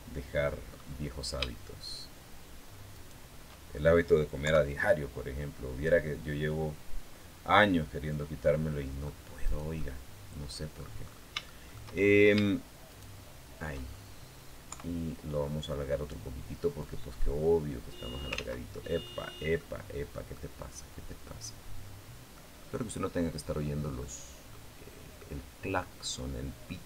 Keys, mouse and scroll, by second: 2.7 shift+right click, 4.2 KP_3, 5.7-7.6 drag, 7.8 middle click, 8.2 middle click, 9.2 right click, 9.6-10.7 middle drag, 10.8-12.0 scroll up 7, 11.2 shift+middle click, 12.7 shift+right click, 13.6 shift+scroll down 2, 14.5 KP_3, 15.2 scroll down 2, 16.6-18.3 drag, 18.1 ctrl+z, 18.7-19.1 scroll up 2, 19.3 middle click, 20.7 scroll up 1, 21.0-22.3 middle drag, 22.4 scroll up 1, 23.8 middle click, 25.7-26.2 scroll down 1.